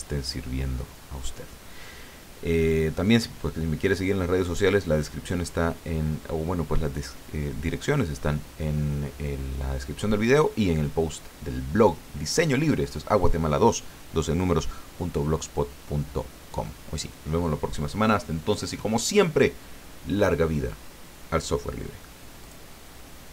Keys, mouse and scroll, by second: 22.4 click.